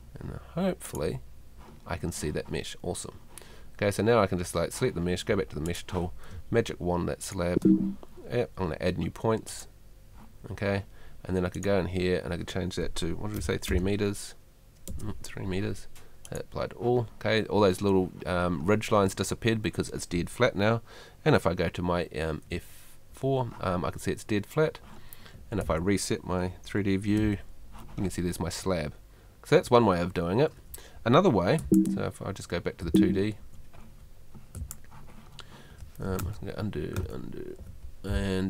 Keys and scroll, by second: 6.3 space, 13.4 3, 14.9 BackSpace, 22.5 F4, 25.3 Escape, 27.2 F4, 31.6 F2, 32.8 F2, 34.6 F2, 36.2 super+z.